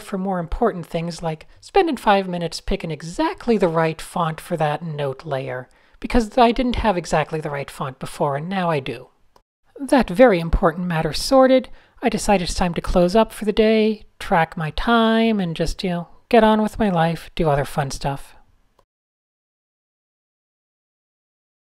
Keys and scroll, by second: 5.1 Left, 5.2 shift+1, 5.7 Down, 5.9 shift+1, 7.4 super+s, 9.6 a, 12.3 shift+super+a, 13.2 typing, 15.1 shift+super+a, 15.3 typing.